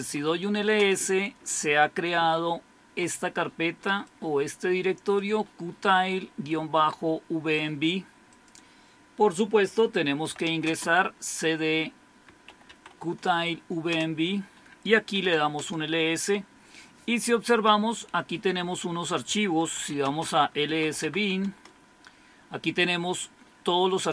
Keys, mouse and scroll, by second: 0.0-0.8 typing, 4.0-7.7 drag, 8.3-10.2 drag, 10.0-11.0 typing, 12.0-13.0 typing, 13.9 Return, 14.9-15.7 typing, 19.5-21.3 typing, 21.5 Return.